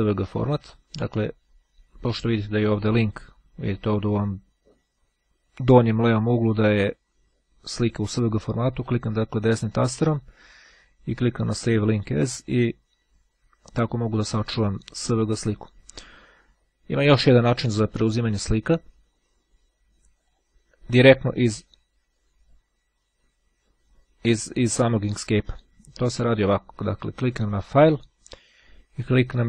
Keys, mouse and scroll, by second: 8.7-11.0 right drag, 11.5 click, 15.1 click, 18.3 click, 20.3 click, 26.1-27.7 drag.